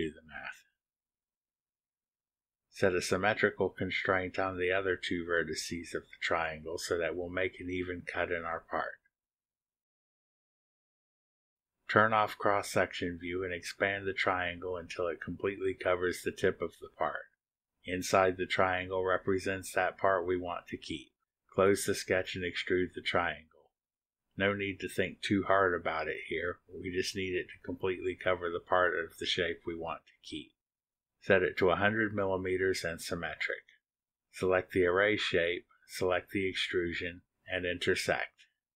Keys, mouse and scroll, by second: 0.0-0.6 typing, 2.0 click, 2.5 click, 3.6 click, 5.4 ctrl+click, 7.8 click, 10.8 click, 13.5 click, 14.0 scroll up 1, 14.5 click, 15.9-17.8 drag, 21.7 click, 26.1 click, 28.3 1, 28.7 0, 31.6 click, 33.4 click, 34.7 scroll down 2, 34.8 click, 37.2 click, 37.8 ctrl+click.